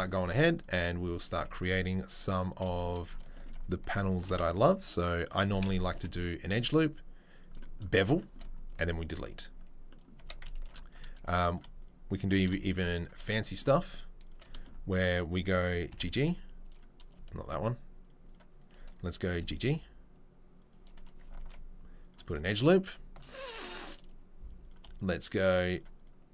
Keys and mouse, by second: 0.5 alt+click, 0.6-8.9 alt+middle drag, 4.2 ctrl+b, 5.9 Delete, 8.9 alt+right click, 9.0-12.6 alt+middle drag, 10.5 ctrl+r, 12.6 shift+right click, 12.7-14.2 shift+middle drag, 14.2 shift+right click, 14.3 shift+middle click, 15.0 shift+click, 15.0 shift+middle click, 15.9 g, 19.3 g, 21.4 ctrl+r, 22.4-26.3 middle drag, 24.6 click, 25.3 shift+click.